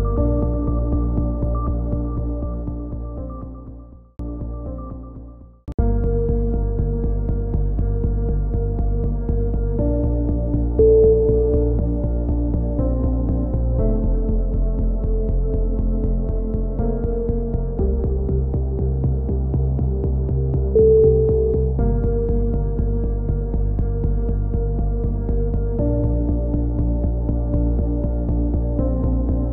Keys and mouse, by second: 9.5 shift+d, 9.8-12.6 drag, 12.6 KP_3, 13.2 c, 13.6-14.2 right drag, 14.0 e, 17.0 a, 17.2 c, 18.1 middle click, 18.6-19.4 drag, 19.4 a, 19.5-20.4 drag, 21.0 right click, 21.0 g, 21.9 e, 23.6 e, 25.0-25.6 middle drag, 25.6 e, 27.2 e, 28.7 a, 29.0-29.5 drag.